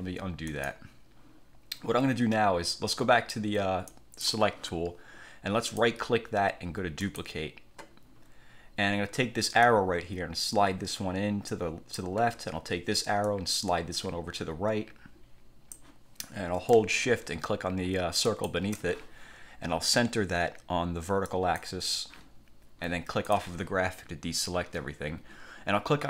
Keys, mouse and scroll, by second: 0.6 click, 4.0 click, 5.8 right click, 7.1 click, 9.8-12.3 drag, 13.4-16.1 drag, 18.4 shift+click, 21.4 click, 23.4 click.